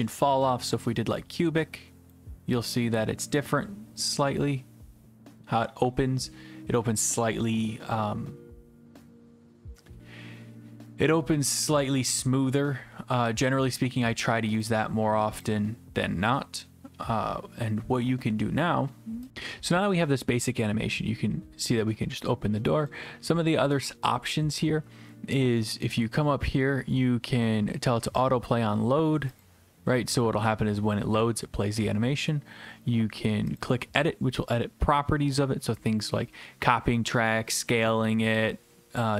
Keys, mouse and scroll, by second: 0.5 click, 14.7 click, 15.4 click, 22.9 click, 29.4-30.5 drag, 33.6-34.6 drag.